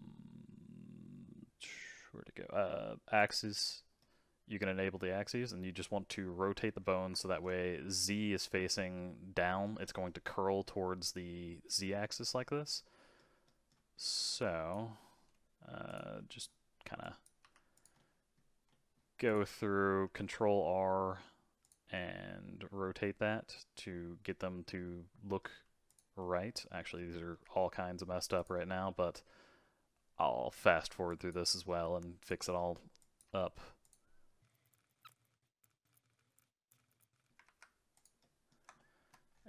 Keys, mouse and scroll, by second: 3.1 click, 4.0-6.8 middle drag, 6.8-7.1 scroll up 4, 7.1-14.4 shift+middle drag, 14.4 click, 14.9 middle click, 15.9 click, 16.2 middle click, 17.0 click, 17.4 g, 17.9-19.2 middle drag, 19.2 click, 20.0 ctrl+r, 21.9-24.9 middle drag, 25.8 click, 26.2-27.3 middle drag, 27.3 g, 28.6-31.1 middle drag, 31.1 click, 31.6 g, 32.4 middle click, 33.0 click, 33.2 g, 34.4 middle click, 34.4 click, 34.5 g, 34.6 click, 34.6 g, 34.7 shift+middle click, 34.8 click, 35.0 g, 35.0 shift+middle click, 35.1 click, 35.1 click, 35.2 g, 35.3 middle click, 35.6 middle click, 35.8 click, 35.9 middle click, 35.9 ctrl+r, 36.0 middle click, 36.1 middle click, 36.2 g, 36.3 shift+middle click, 36.9 middle click, 37.0 ctrl+r, 37.1 middle click, 37.2 click, 37.4 ctrl+r, 38.2-39.3 middle drag, 39.3-39.4 scroll down 5.